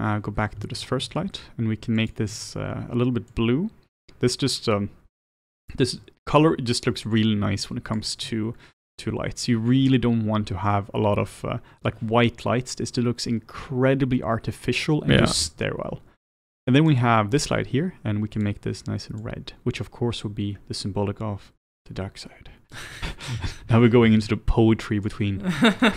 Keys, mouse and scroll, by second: 0.3 scroll down 1, 0.6-3.4 shift+middle drag, 3.4 click, 17.0 click, 19.2 click, 25.8 click.